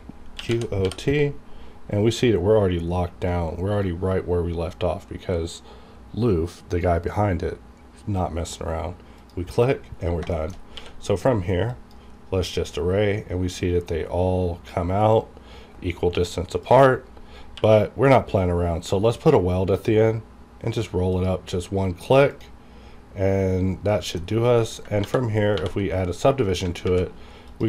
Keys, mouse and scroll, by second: 0.4-0.8 typing, 9.1 click, 9.2 click, 9.8-10.1 scroll down 1, 10.3 shift+middle click, 10.6 scroll up 1, 10.7 q, 11.7 click, 12.2 scroll up 1, 13.1 scroll up 1, 13.5 scroll down 1, 14.2 scroll up 1, 14.6 scroll down 1, 14.9-15.3 scroll up 1, 15.3 scroll down 1, 15.8 scroll up 1, 16.5 click, 16.9 scroll up 1, 17.5 q, 19.7 click, 19.9 click, 20.2 scroll up 1, 21.1 click, 21.5-22.2 scroll down 1, 22.2 click, 23.5 scroll down 1, 23.9 middle click, 24.2-24.6 scroll up 1, 24.6 middle click, 25.0 ctrl+1, 25.6 ctrl+2, 26.9 alt+v, 27.4 click.